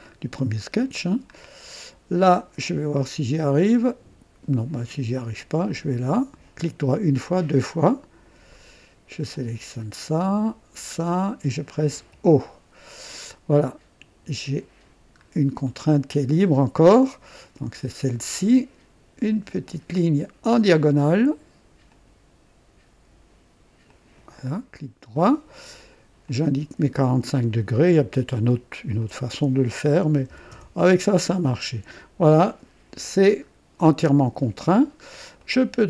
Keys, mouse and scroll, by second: 0.6 right click, 1.3-1.7 scroll down 1, 5.6 click, 6.8 right click, 7.3 right click, 9.3 click, 10.7 click, 12.0 o, 13.6 right click, 15.2 scroll up 1, 15.6 right click, 16.5 scroll up 1, 16.9 right click, 19.6 click, 21.8 click, 23.8 click, 24.7 right click, 26.2 click, 27.4 click, 28.9 click, 30.1-30.7 typing, 30.5 KP_Enter, 33.4-34.1 typing, 33.4 scroll down 2, 34.0 right click, 34.8 scroll down 1, 35.4 right click.